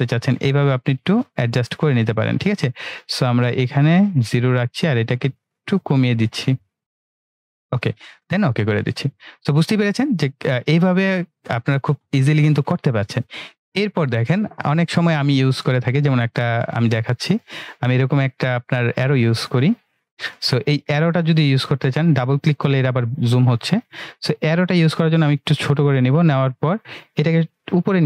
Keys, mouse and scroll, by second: 10.3 typing, 16.5-17.5 drag, 16.5 typing.